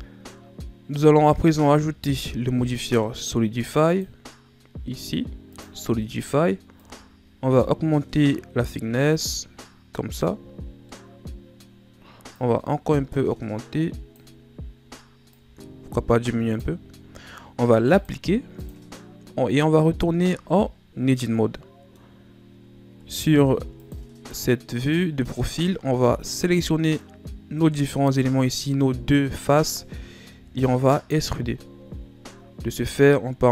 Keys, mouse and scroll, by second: 0.9 Tab, 1.7 Tab, 2.1-3.9 middle drag, 3.9 click, 5.6-9.8 drag, 10.6 scroll down 2, 10.9-12.3 middle drag, 12.3-19.8 drag, 19.8 Tab, 21.1 middle click, 22.1 scroll up 2, 23.0 ctrl+Tab, 24.4 middle click, 25.3 right click, 27.5 shift+right click, 30.3 KP_7, 31.6 ctrl+scroll up 3, 32.4 scroll down 1, 32.7 z, 33.3-33.5 ctrl+scroll up 1.